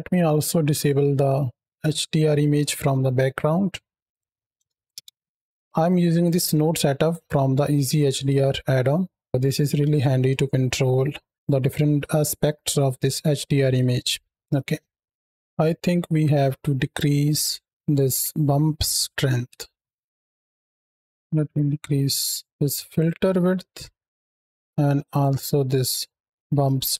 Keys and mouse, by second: 1.1-1.6 middle drag, 3.1 middle click, 3.9 click, 5.6 ctrl+space, 5.7-6.1 drag, 6.3 click, 15.1 ctrl+space, 19.4 ctrl+space, 20.1-21.4 drag, 23.8-24.2 middle drag, 24.9-26.9 drag.